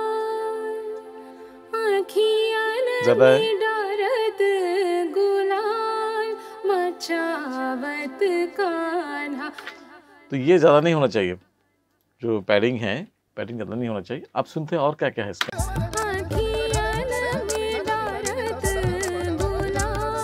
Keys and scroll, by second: 9.6 space, 15.4 space.